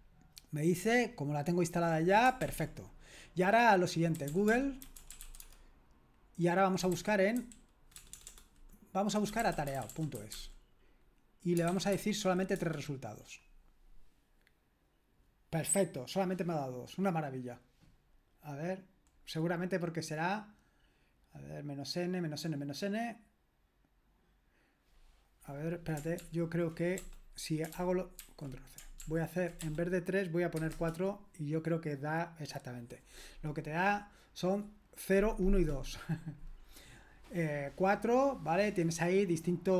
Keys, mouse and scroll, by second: 2.4 ctrl+l, 3.9-12.7 typing, 26.2 ctrl+p, 26.9 BackSpace, 27.7 ctrl+p, 28.2 ctrl+c, 29.0 ctrl+p, 30.5 BackSpace, 30.7 BackSpace.